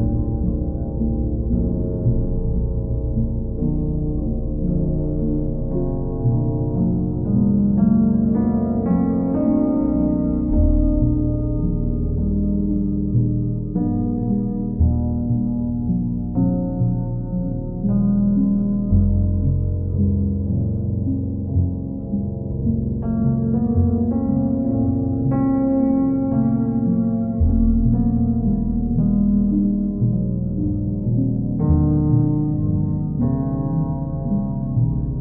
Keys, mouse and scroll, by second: 1.4 click, 1.8 click, 4.2 click, 4.5 shift+click, 5.3 ctrl+click, 7.1 ctrl+click, 8.1 click, 8.4 shift+click, 10.2 click, 10.7 ctrl+click, 11.3 ctrl+click, 13.2 click, 14.9 click, 15.5 ctrl+click, 17.4 click, 17.8 click, 19.2 click, 20.6 click, 21.1 shift+click, 22.6 ctrl+click, 24.1 click, 24.7 shift+click, 25.5 shift+click, 26.6 click, 27.3 click, 27.7 shift+click, 28.5 click, 28.7 ctrl+z, 29.2 ctrl+click, 30.7 click, 31.9 click, 32.0 ctrl+z, 32.8 click, 33.2 shift+click, 34.7 ctrl+click.